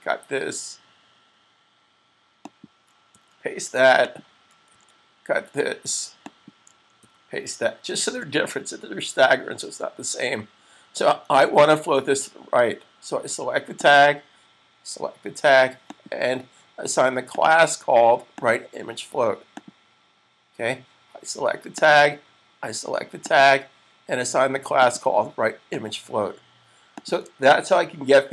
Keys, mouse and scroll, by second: 2.4 click, 3.3 super+v, 4.1 click, 4.3 click, 5.0 super+x, 6.3 click, 6.6 click, 6.9 super+v, 13.8 click, 27.5 super+s.